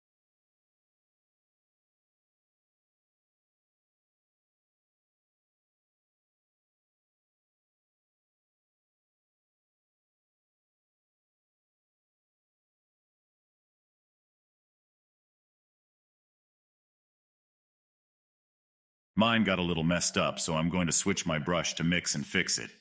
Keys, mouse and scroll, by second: 0.4 click, 1.0 middle click, 1.5 click, 2.3 middle click, 2.8-3.3 scroll up 1, 3.3 shift+middle click, 3.8-5.1 drag, 5.1 middle click, 6.0-7.6 drag, 7.6-8.6 middle drag, 8.6-9.0 scroll up 1, 9.0-10.3 shift+middle drag, 10.3-11.3 drag, 11.3 scroll down 2, 11.6-13.1 middle drag, 13.1-15.0 drag, 15.0-16.7 middle drag, 16.7-18.5 drag, 18.8-22.0 middle drag, 22.0 scroll up 1, 22.1 middle click, 22.6 scroll up 2.